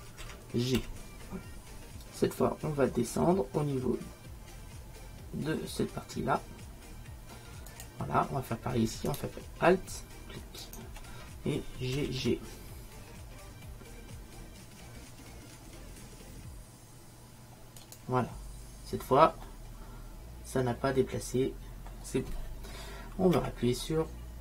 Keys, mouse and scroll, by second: 0.3 g, 12.0 g, 19.0-21.0 middle drag.